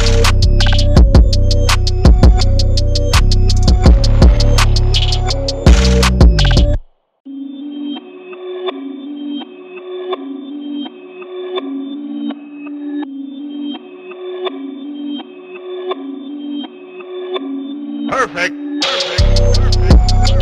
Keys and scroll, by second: 0.0-0.4 typing, 1.3 super+=, 2.1 super+t, 2.8 super+t, 3.7 Return, 4.0 super+Tab, 4.9 super+=, 6.0 BackSpace, 6.0 super+d, 6.5 super+d, 7.7 super+d, 7.7 i, 8.4 super+d, 9.4 super+d, 9.6 i, 10.4 super+d, 10.5 i, 11.1 super+t, 11.3 Return, 11.4 super+d, 12.4 super+t, 12.7 Return, 13.2 super+t, 14.2 Return, 15.6 super+t, 16.0 Return, 17.3 super+0, 17.4 super+1, 19.5 super+t, 19.9 Return, 20.2 super+d.